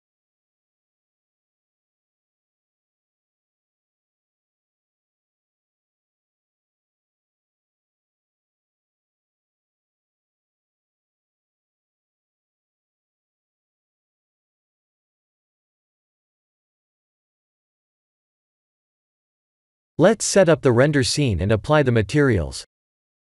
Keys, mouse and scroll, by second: 0.6 click, 1.2 KP_1, 2.0 KP_3, 3.1 r, 3.9 g, 4.6 r, 6.3 g, 7.5 KP_1, 8.5 click, 14.8 middle click, 17.2-17.6 scroll down 1, 17.8 shift+middle click, 18.2 middle click, 21.5 shift+`.